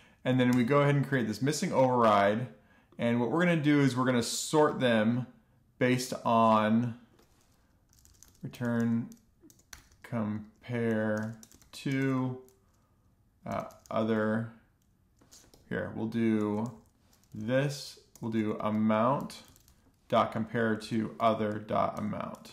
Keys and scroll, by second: 0.9 Return, 8.0-12.4 typing, 13.6-14.8 typing, 15.8 Escape, 16.2 Left, 16.4 Left, 17.0 Left, 17.3-20.5 typing, 20.7 super+Right, 21.1 Left, 21.5 typing, 22.3 Return.